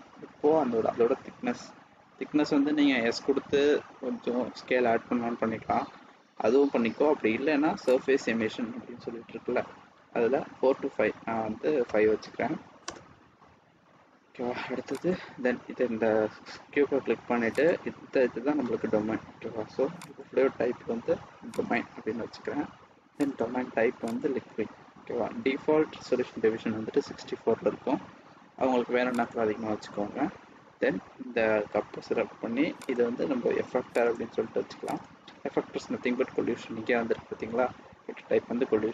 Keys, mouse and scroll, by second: 1.0 scroll down 3, 7.8 click, 14.9 click, 17.6 click, 23.1 click, 29.2 click, 32.8 click, 34.0 click.